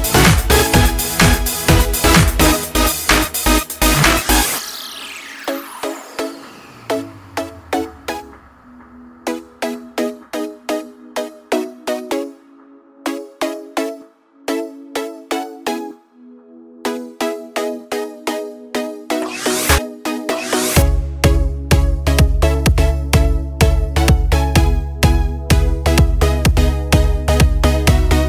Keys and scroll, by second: 17.6 ctrl+t, 24.5 ctrl+space.